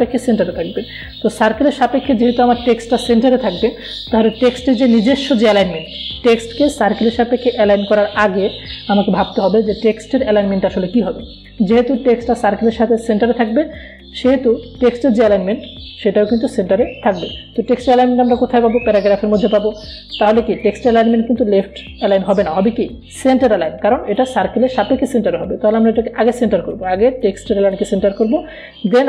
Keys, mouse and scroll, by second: 14.1 click, 19.7 click, 27.0 click.